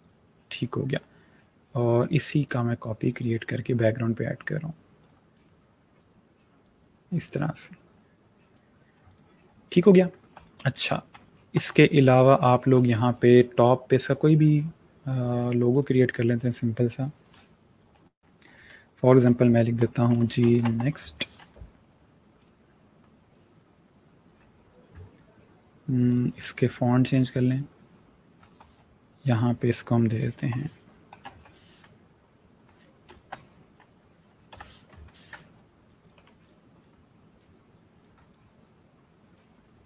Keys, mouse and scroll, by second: 1.8 click, 10.2 space, 10.3 click, 10.7 space, 11.2-11.6 alt+scroll down 2, 11.6 space, 11.6 click, 12.0 space, 12.6 click, 15.3 click, 18.9 Caps_Lock, 19.6-21.0 typing, 22.2 click, 30.2-31.6 typing, 34.4-34.7 typing, 35.9 click.